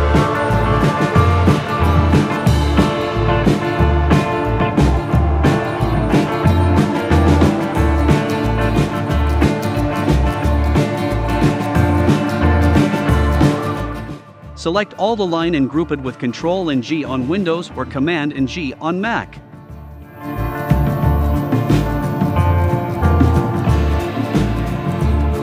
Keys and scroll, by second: 1.2 shift+Up, 3.8 shift+Down, 7.4 shift+Up, 8.8 v, 15.5 super+g, 18.5 shift+Up, 19.8 super+c, 20.7 super+f, 22.3 shift+Left.